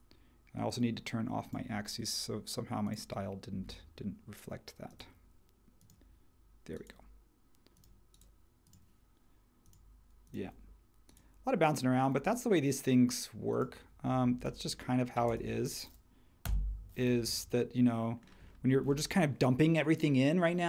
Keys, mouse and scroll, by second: 16.4 BackSpace.